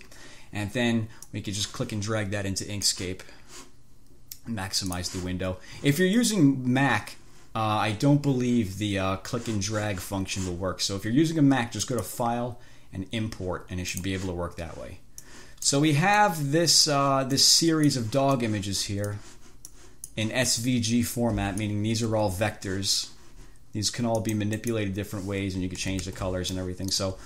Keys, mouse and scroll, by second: 1.5-3.4 drag, 5.2 click, 12.1 click, 14.2 click, 15.6 click, 16.5 click, 17.7 click, 18.6 click, 20.0 click, 20.8-22.1 drag, 22.4 F2, 24.5 click, 24.9 click, 26.1 ctrl+z, 26.8 ctrl+click.